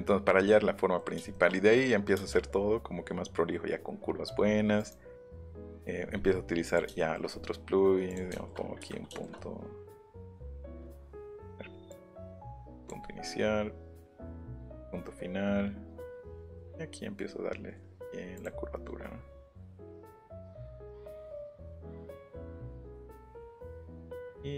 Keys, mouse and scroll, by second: 1.0 middle click, 1.3 shift+middle click, 4.7 click, 5.6 click, 6.6 click, 7.0 shift+middle click, 8.1 click, 8.3 shift+middle click, 8.9 shift+middle click, 10.2 click, 10.6 scroll up 1, 11.9 click, 12.8 click, 13.0 scroll down 1, 14.6 click, 16.5-18.1 drag, 18.4 click, 20.3 click, 20.6 click, 20.9-21.4 scroll down 1, 21.4-21.8 scroll up 1, 21.8 click, 23.7 scroll down 2, 24.0 scroll up 2.